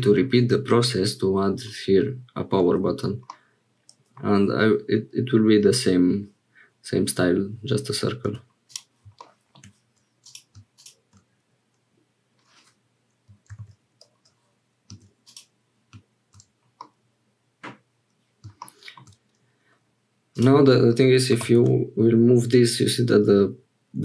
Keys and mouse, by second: 3.3 click, 8.3 x, 10.2 click, 13.5 ctrl+j, 15.2 click, 16.8 click, 20.3 click, 21.3 g.